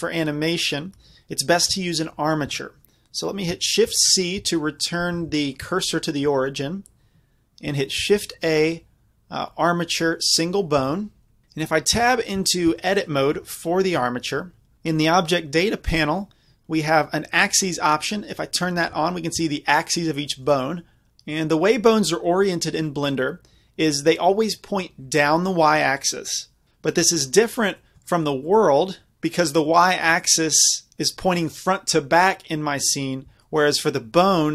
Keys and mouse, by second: 3.9 shift+c, 4.4 z, 5.2-8.1 middle drag, 5.2 z, 8.1 shift+a, 10.8 z, 11.4 z, 12.0 Tab, 12.9-14.2 middle drag, 13.4 a, 14.0 KP_Decimal, 17.6-19.5 middle drag, 18.6 click, 20.6 middle click, 27.4 middle click, 28.2-30.0 middle drag, 30.5 middle click, 33.5-34.5 middle drag.